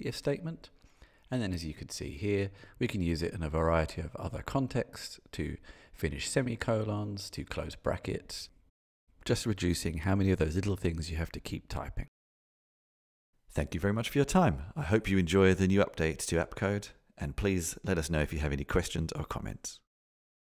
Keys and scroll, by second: 1.7 Return, 4.9 Return, 7.6 shift+super+Return, 10.3 Return, 13.0 shift+super+Return.